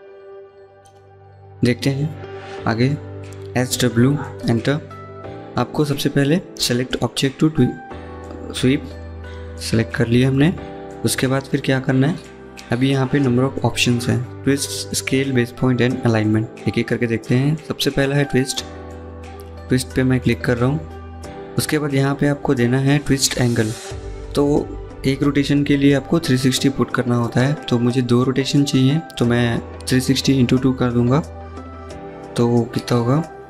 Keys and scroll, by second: 2.9-3.8 typing, 32.9 7.